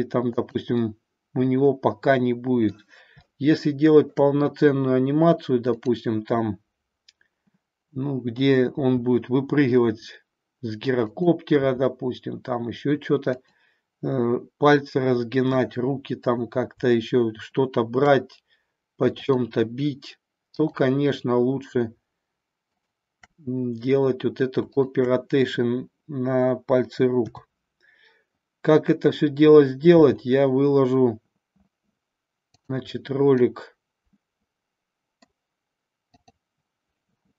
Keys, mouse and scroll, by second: 0.5 click, 0.8-2.8 middle drag, 3.2-4.2 shift+middle drag, 8.6 r, 13.5 click, 16.1-18.5 drag, 19.2-21.7 shift+drag, 28.4 KP_7, 30.0 r, 33.0-35.3 middle drag, 36.1 click.